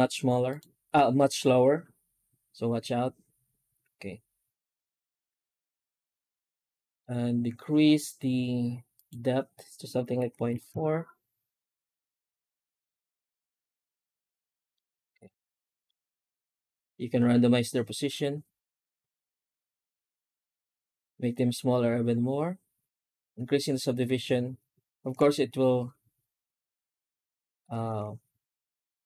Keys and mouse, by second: 14.6-15.7 middle drag, 16.1 F9.